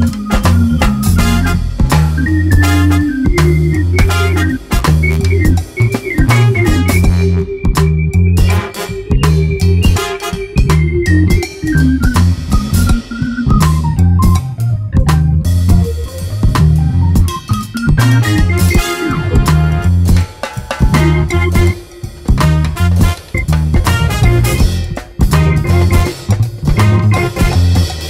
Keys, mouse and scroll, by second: 0.1 Tab, 0.3 click, 0.8 ctrl+l, 2.0 shift+click, 2.5 l, 3.7 click, 4.6 click, 5.6 Tab, 5.7 `, 6.0 alt+a, 6.1 `, 7.8 Tab, 7.9 click, 8.3 l, 8.7 click, 9.3 Tab, 10.2 scroll up 2, 11.5 Tab, 11.7 click, 12.3 ctrl+l, 13.1-14.5 drag, 14.7 Tab, 16.3 scroll down 1, 16.7-17.0 scroll up 1, 17.0 click, 17.4 Tab, 17.5 click, 18.0 ctrl+l, 19.1 click, 20.5 ctrl+l, 21.2 l, 21.6 click, 22.1 Tab, 22.3 a, 22.5 scroll down 2, 23.6 Tab, 23.7 click, 24.1 l, 24.7 click, 25.1 l, 25.6 click, 26.0 click, 26.2 Tab, 26.3 scroll down 1, 27.9 click.